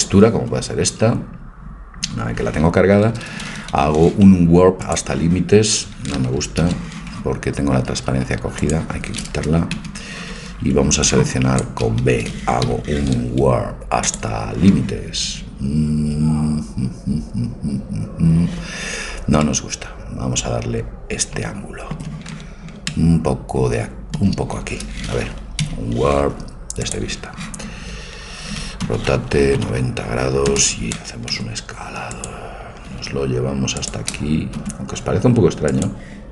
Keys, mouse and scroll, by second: 3.7 u, 6.7 ctrl+z, 8.6-10.5 drag, 9.7 a, 10.7 b, 12.7 u, 19.4 middle click, 25.7 u, 28.9 r, 31.4 s, 33.2 g, 34.6 s.